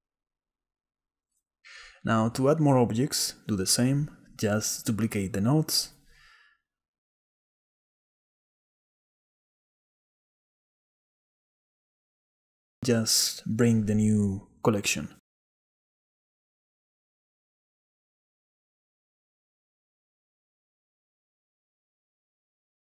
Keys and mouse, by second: 0.4 click, 1.4 click, 2.0 shift+d, 3.5 click, 4.2 drag, 4.6 shift+drag, 5.2 shift+drag, 5.7 shift+click, 6.5 shift+d, 7.4 click, 8.6 click, 9.7 click, 12.9 click, 14.9-15.4 drag, 15.8 click, 16.4 click, 16.6 middle click, 17.0 click, 17.6 click, 17.9 click, 18.5-19.1 drag, 21.0 middle click, 21.4 middle click, 21.7 shift+middle click, 21.8 shift+click, 22.3 shift+click, 22.4 shift+middle click.